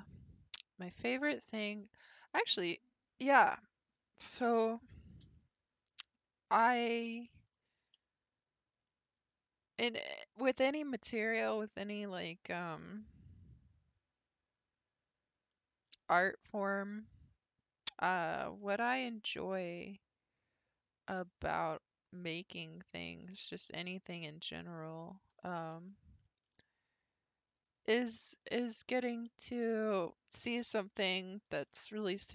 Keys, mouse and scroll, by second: 6.5-10.8 middle drag, 16.5-16.9 scroll down 1, 16.9-17.8 shift+middle drag, 17.8-18.4 scroll up 2, 19.1 ctrl+r, 22.3 click, 22.6-23.1 middle drag, 23.1 g, 25.3 r, 28.1-30.7 middle drag, 30.7-31.5 scroll down 3, 31.5-32.0 scroll up 2, 32.0-32.3 shift+middle drag.